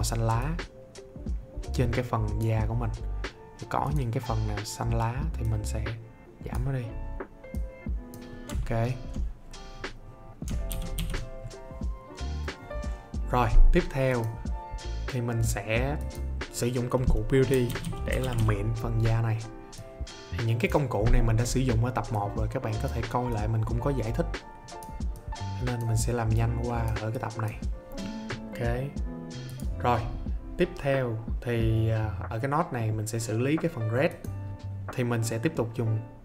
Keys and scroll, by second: 10.6 ctrl+d, 17.2-18.8 typing.